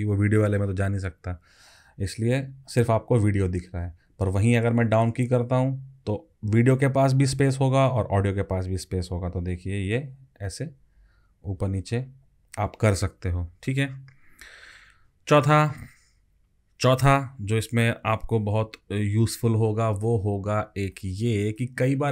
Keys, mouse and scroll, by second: 3.4 alt+Up, 9.3 alt+Down, 9.9 alt+Down, 10.7 alt+Up, 11.0 alt+Up, 11.4 alt+Up, 11.8 alt+Down, 12.2 alt+Down, 12.4 alt+Down.